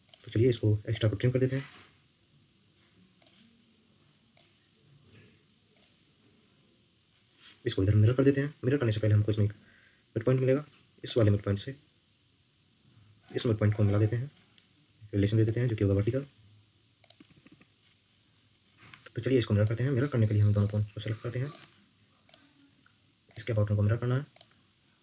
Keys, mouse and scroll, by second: 8.6 Escape, 8.8 Escape, 9.0 Escape, 9.2 Escape, 10.3 Escape, 10.5 Escape, 13.2 shift+click, 16.1 Escape, 17.1 Escape, 17.3 Escape, 17.5-19.0 Escape.